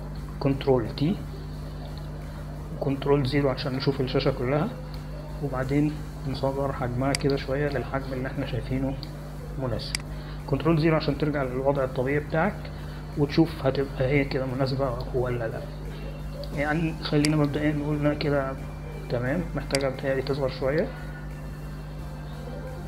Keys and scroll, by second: 2.9 ctrl+t, 4.9 ctrl+0, 12.9 ctrl+0.